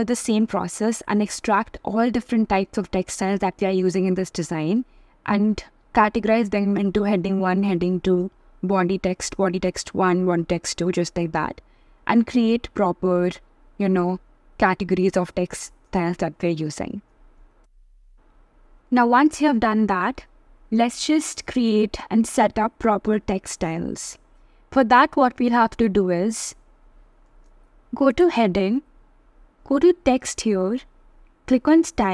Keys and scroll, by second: 18.4 super+c, 18.5 super+v.